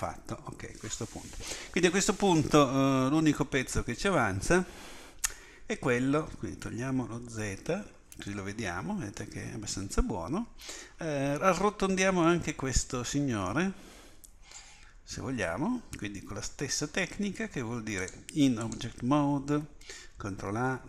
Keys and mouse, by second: 7.4 z, 8.4 click.